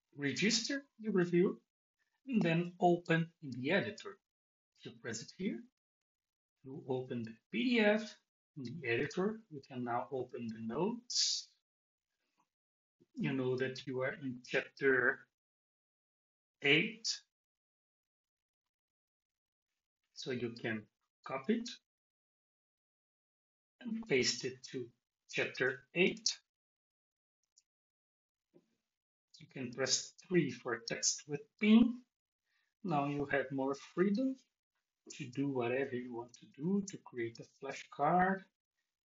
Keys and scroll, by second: 25.6 Return, 26.0 Tab, 27.4 super+v.